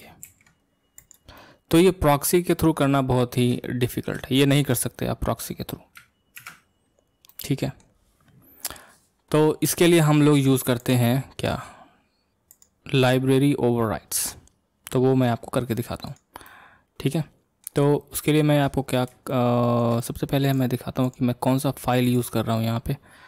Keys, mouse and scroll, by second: 0.2 alt+r, 1.0 click, 1.4-3.0 middle drag, 3.0 scroll down 2, 3.6-6.4 shift+middle drag, 6.4 ctrl+Tab, 7.3-10.3 middle drag, 10.8-13.8 drag, 16.0 click, 16.4-18.8 middle drag, 18.8-19.3 scroll up 1, 19.3-20.4 shift+middle drag, 20.4-22.4 drag.